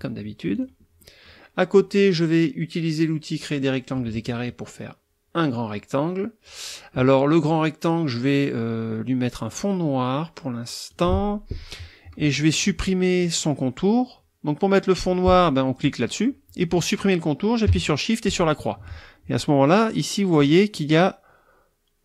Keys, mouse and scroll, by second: 0.5 click, 0.8 scroll up 1, 1.0 middle click, 1.1 click, 3.4 click, 3.7-4.5 scroll up 1, 4.5-6.6 drag, 6.6-10.9 scroll up 1, 10.9 click, 11.2-15.8 scroll up 1, 15.8 click, 18.3 shift+click, 20.4 right click.